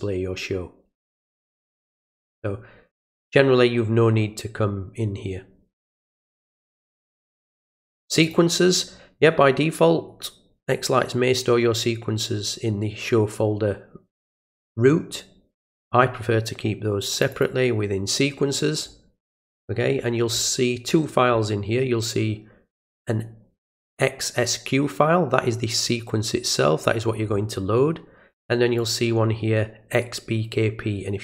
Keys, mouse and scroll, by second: 6.0 click, 8.2 click, 17.1 click, 17.3 click, 18.8 scroll down 1, 19.7-20.3 scroll up 1, 20.3-20.7 scroll down 1, 21.4-23.6 middle drag, 23.6 click, 28.8 click.